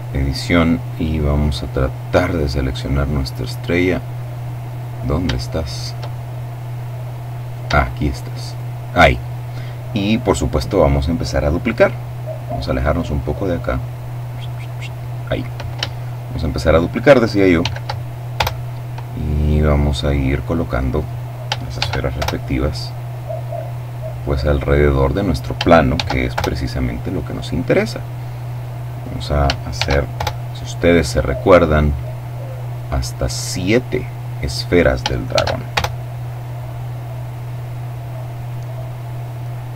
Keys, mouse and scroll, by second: 2.0-2.7 scroll up 2, 3.1-4.0 scroll down 2, 4.0 scroll down 1, 4.1-6.2 middle drag, 8.2 shift+right click, 9.6-10.6 scroll down 2, 10.6-11.1 scroll up 2, 11.1-11.5 scroll up 1, 11.5-12.8 scroll down 2, 12.8 scroll up 2, 12.9-14.3 scroll down 2, 14.3-14.9 scroll down 1, 14.9-15.5 scroll up 2, 15.5-17.3 shift+scroll up 1, 17.3-17.9 shift+scroll up 1, 17.3 shift+d, 17.9-18.6 shift+scroll up 1, 18.0 Return, 19.2-21.2 drag, 21.5 shift+d, 21.9 shift+Return, 22.6-25.3 drag, 25.6 shift+d, 26.0 shift+Return, 27.1-29.1 drag, 29.4 shift+d, 29.8 shift+Return, 31.1-34.3 drag, 35.0 shift+d, 35.4 shift+Return, 36.4-38.3 drag, 38.4-39.7 drag.